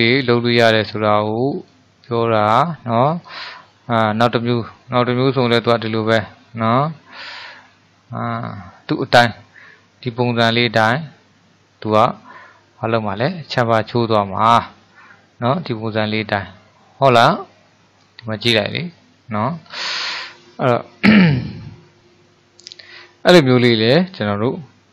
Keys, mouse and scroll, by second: 1.6-4.6 drag, 6.8-9.8 middle drag, 10.1-15.2 middle drag, 19.7 scroll down 3, 20.2-23.3 middle drag, 24.6-24.9 middle drag.